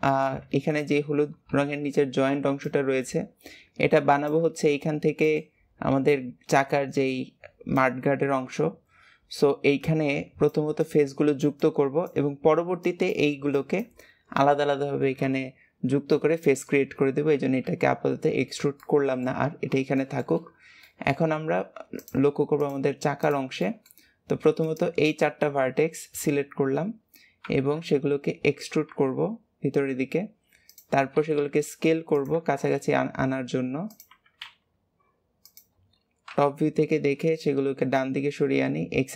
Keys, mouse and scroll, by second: 0.1 alt+z, 1.4 KP_3, 18.7-20.5 shift+middle drag, 20.5 scroll up 1, 20.7 shift+middle click, 21.2 scroll up 1, 21.9 click, 22.5 shift+click, 23.1 shift+click, 23.5-24.5 shift+middle drag, 24.5 shift+click, 37.9 click.